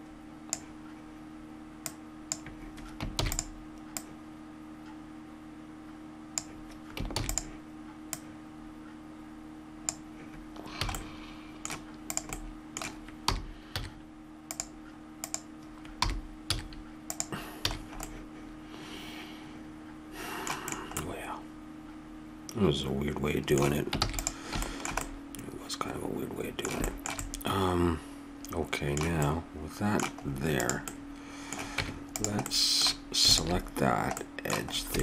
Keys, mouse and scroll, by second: 1.8-5.6 drag, 3.1 shift+d, 7.1 shift+d, 8.1-9.8 drag, 10.9-12.1 middle drag, 10.9 a, 12.1-13.7 right drag, 13.3 r, 15.2-17.0 right drag, 16.0 r, 17.6 a, 18.0-19.6 middle drag, 20.6-22.8 middle drag, 24.0 ctrl+s, 29.0-30.6 middle drag, 30.6 right click, 30.9-32.3 middle drag, 31.8 Tab, 33.3-35.0 middle drag.